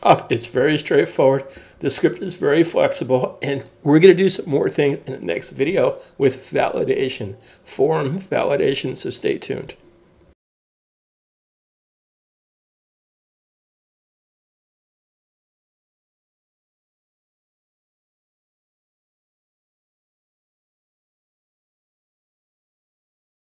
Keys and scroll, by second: 0.6 super+Tab.